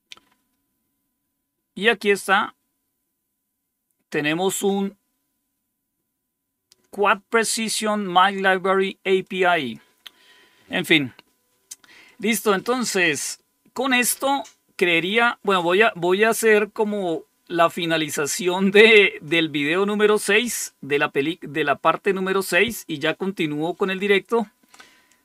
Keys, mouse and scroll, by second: 9.1 click, 11.9 click.